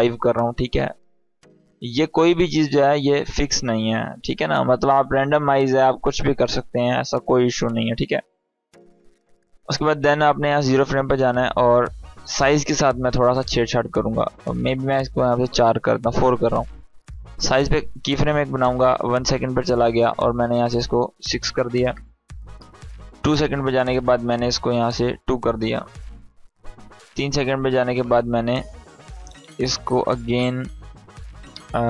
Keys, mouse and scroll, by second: 0.9 click, 7.2-7.9 drag, 14.0 click, 17.0-19.2 drag, 22.5-23.8 drag.